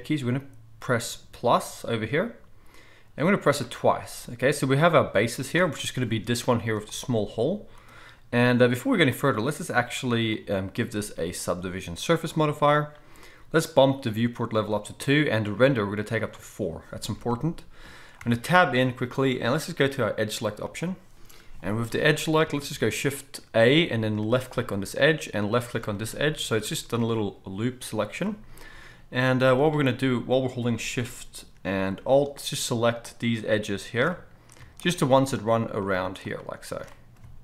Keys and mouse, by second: 1.5-5.1 middle drag, 5.1-7.2 right drag, 7.2-7.7 middle drag, 7.7-11.4 right drag, 11.4-20.7 middle drag, 18.2 Tab, 20.7-24.5 drag, 22.4 alt+a, 24.5-26.6 alt+shift+middle drag, 26.6-32.2 drag, 26.6 z, 29.2 z, 32.2-37.2 alt+shift+right drag, 32.3 alt+shift+click, 33.0 alt+shift+click, 34.9 alt+shift+click.